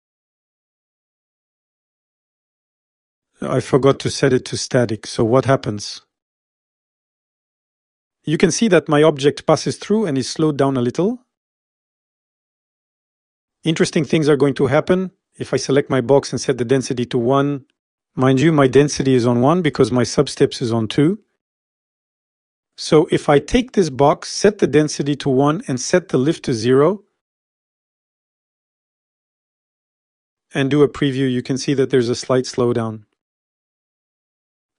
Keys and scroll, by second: 0.2 0, 3.0 Home, 5.2 s, 13.2 Home, 18.3 1, 18.5 Return, 28.6 0, 29.0 Return.